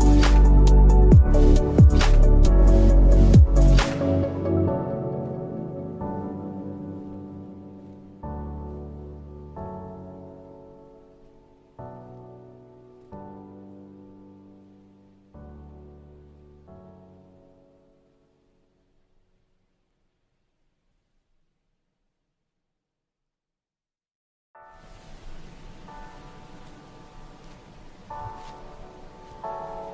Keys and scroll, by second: 2.3 i, 2.6 v, 3.3 i, 4.5 v, 5.4 i, 5.6 v, 7.1 a, 10.2 v, 13.2 i, 14.0 ctrl+shift+], 14.5 v, 17.1 p, 19.0 ctrl+z, 20.5 ctrl+z, 21.0 ctrl+z, 22.4 ctrl+z, 24.2 i, 24.4 v, 27.3 v, 27.8 Delete, 27.9 p.